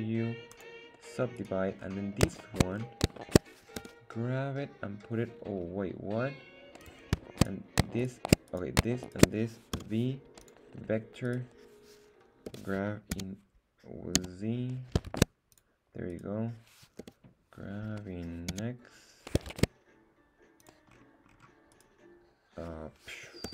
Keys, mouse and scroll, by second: 1.4 right click, 1.8 scroll up 1, 2.4 shift+middle click, 2.7 scroll up 2, 3.1 shift+middle click, 3.7 g, 6.8 click, 7.4 shift+right click, 8.0 shift+right click, 8.5 right click, 9.0 shift+right click, 9.7 v, 11.2 click, 11.2 right click, 12.5 g, 13.1 x, 14.1 z, 15.1 shift+Tab, 15.5 click, 16.1 right click, 17.0 g, 18.5 x, 19.5 shift+Tab, 20.6 click, 20.9-21.5 scroll down 4, 21.7 right click, 23.4 g.